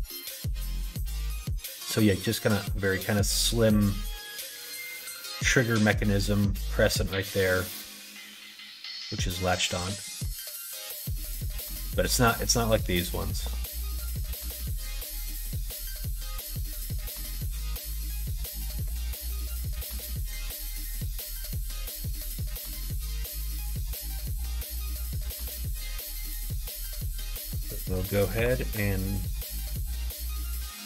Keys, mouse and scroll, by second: 23.2 middle click, 24.6 middle click, 27.6 click, 28.3 2, 29.0 click, 30.2 click.